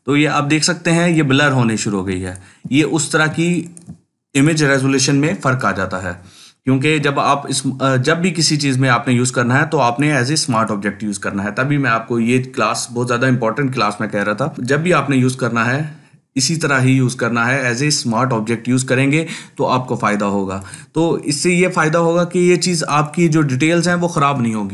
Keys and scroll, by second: 1.9 ctrl+space, 2.4 ctrl+space, 5.0 ctrl+t, 14.3 ctrl+space.